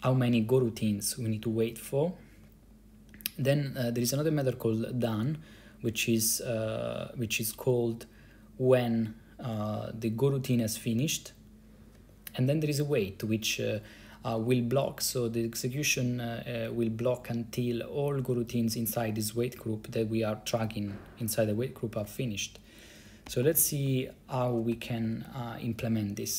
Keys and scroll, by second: 23.2-25.4 typing, 25.9 Return.